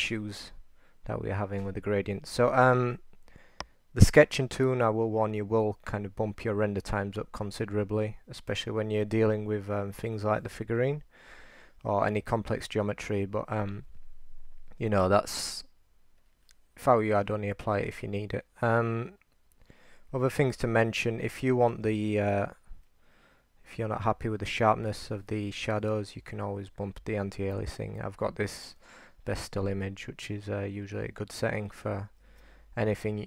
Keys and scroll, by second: 20.5-22.3 typing, 32.3 super+z.